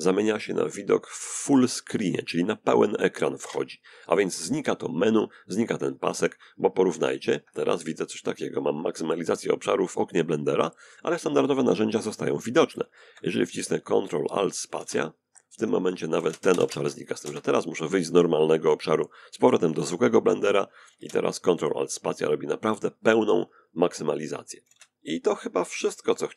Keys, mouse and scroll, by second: 2.0 ctrl+alt+space, 5.5 ctrl+space, 13.3 ctrl+alt+space, 14.7 ctrl+alt+space, 15.0 ctrl+alt+space, 15.2 ctrl+alt+space, 19.5 ctrl+alt+space, 23.2 ctrl+alt+space, 24.9 click.